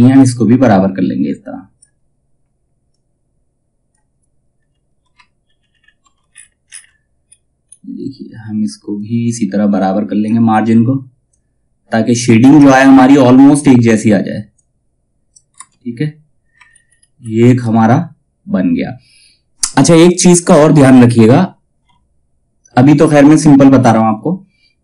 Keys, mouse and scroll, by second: 4.1 scroll down 1, 4.9 alt+scroll down 1, 6.4-6.8 ctrl+scroll down 1, 8.5-15.0 drag, 15.0 space, 15.5-16.1 scroll down 1, 16.3 alt+scroll up 1, 17.1 space.